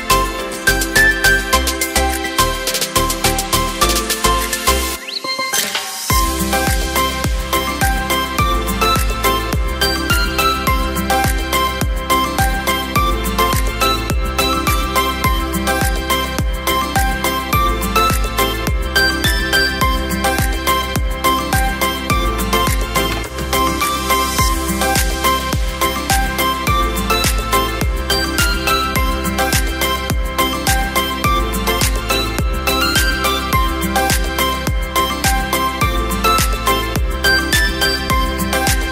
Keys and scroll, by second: 2.1 Delete, 3.2 ctrl+j, 5.2 Return, 7.0 c, 9.1 typing, 24.3 v, 36.2 space, 37.5 space.